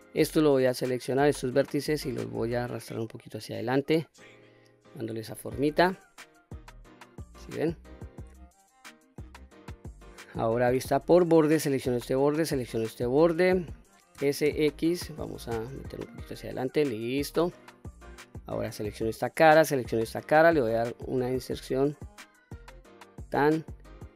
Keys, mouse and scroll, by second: 0.0 click, 1.6-3.6 drag, 4.0 middle click, 5.3 q, 5.8-6.2 scroll down 1, 6.2-9.1 middle drag, 10.7 2, 11.5 click, 12.5 shift+click, 14.2 s, 14.5 x, 16.4 click, 16.8-17.6 middle drag, 17.8-18.7 scroll up 1, 18.8 3, 19.1 click, 19.8 shift+click, 21.1 i, 23.1 click, 23.6-24.0 middle drag.